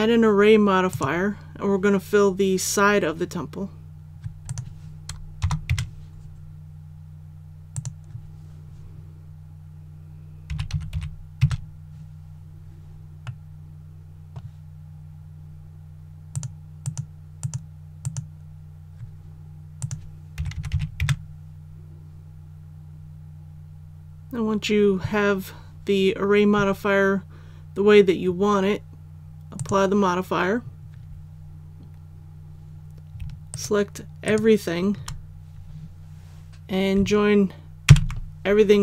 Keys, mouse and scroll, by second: 5.4 KP_0, 7.7-8.8 drag, 10.5 KP_2, 10.7 KP_Decimal, 10.9 KP_1, 13.3-14.8 middle drag, 16.3 click, 20.4 KP_2, 20.6 KP_Decimal, 20.7 KP_2, 29.6 click, 33.5 shift+right click, 34.3 shift+right click, 37.9 ctrl+j.